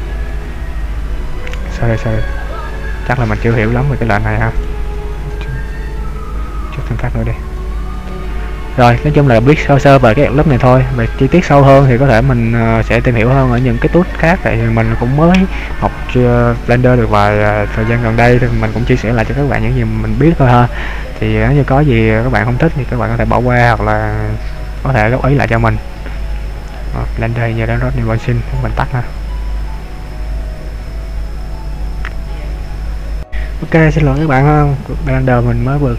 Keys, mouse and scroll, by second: 1.6 ctrl+z, 7.3 click, 7.8-8.6 scroll down 3.